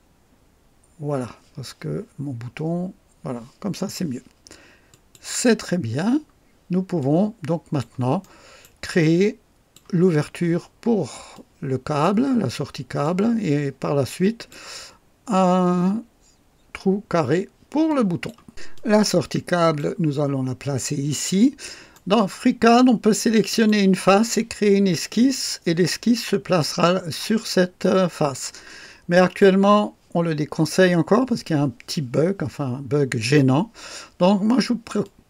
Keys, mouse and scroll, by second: 4.9 click, 5.7-6.3 scroll down 1, 7.0-7.9 drag, 8.2-8.8 right drag, 9.0 click, 11.3 click, 13.0-14.7 drag, 17.8 click, 18.7 click, 21.0-22.1 right drag, 23.4 click, 29.1 click, 35.0-35.2 drag.